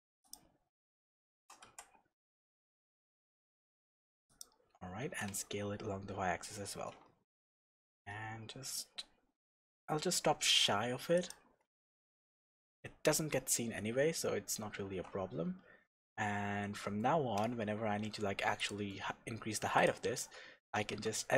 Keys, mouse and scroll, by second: 0.3 click, 1.4 g, 4.4 click, 5.0 s, 11.3 shift+click, 12.0 Tab, 13.4-13.8 scroll down 1, 13.8-14.8 scroll up 1, 14.8 Tab, 18.6 click, 19.2 h, 19.7 click, 20.9 Tab.